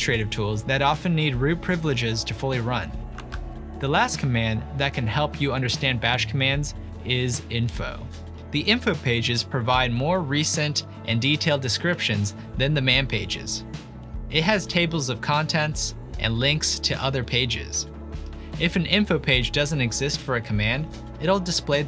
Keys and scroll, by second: 15.7 ctrl+l, 18.6-21.1 typing.